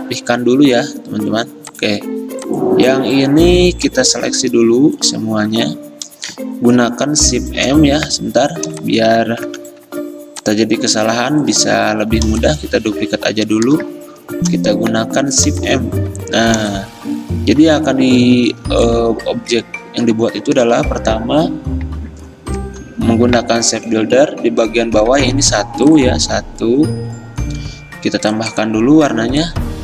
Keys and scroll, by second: 9.6 v, 14.4 m, 18.6 v, 22.7 m.